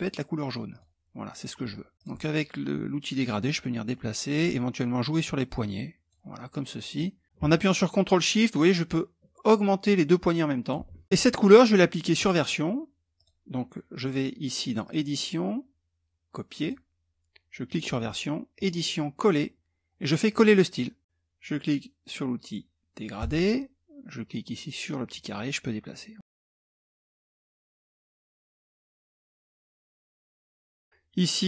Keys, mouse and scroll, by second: 0.3 click, 1.8 click, 2.7-4.2 drag, 4.6-6.0 drag, 6.5-10.4 drag, 12.7 click, 14.4 click, 16.1 click, 17.2 click, 18.1 click, 19.8 click, 22.7 click, 24.6-26.2 drag, 27.4 ctrl+shift+click, 28.4 click, 29.6 ctrl+shift+click, 30.0 middle click.